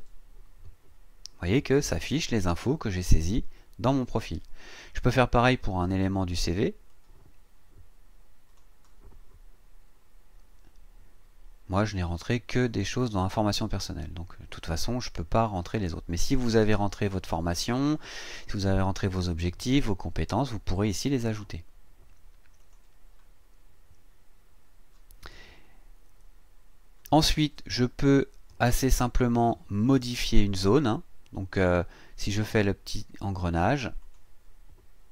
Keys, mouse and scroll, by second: 6.9-8.7 drag, 12.5 click, 22.6 click, 34.0 click.